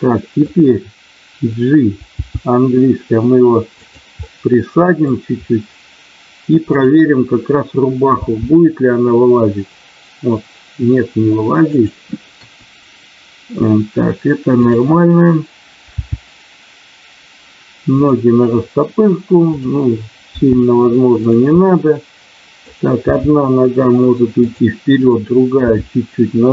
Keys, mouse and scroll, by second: 2.0 g, 3.8 click, 4.1-4.9 scroll up 1, 4.9 middle click, 6.6 click, 8.0 g, 12.3 KP_1, 14.5 click, 15.9 g, 17.9 click, 19.5 click, 20.3 g, 21.3 click, 23.1 g, 24.3 click, 24.9 click.